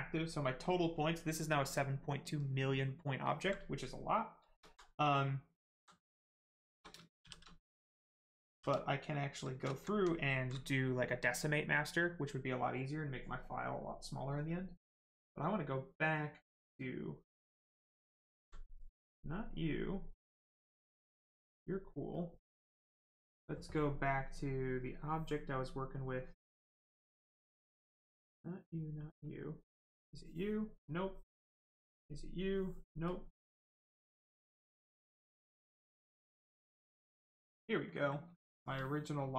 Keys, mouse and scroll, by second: 4.6 alt+right click, 5.0 right click, 5.1 right click, 5.6 alt+right click, 6.1 right click, 6.2 right click, 6.5 shift+right click, 7.2 shift+f, 7.5 right click, 8.4 shift+d, 8.7 right click, 9.4 shift+right click, 9.7 alt+right click, 10.0 alt+right click, 13.0 click, 17.6 click, 18.3 alt+right click, 20.3 click, 20.4 click, 24.0 click, 29.2 click, 32.2 right click, 33.0 click, 36.4 click, 37.4 right click, 38.3 shift+right click, 39.1 shift+click.